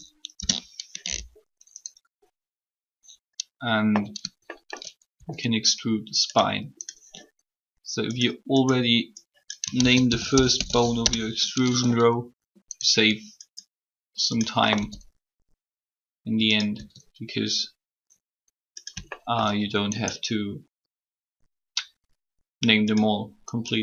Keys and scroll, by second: 0.2 Return, 0.2 typing, 9.6-11.2 typing, 14.7 e.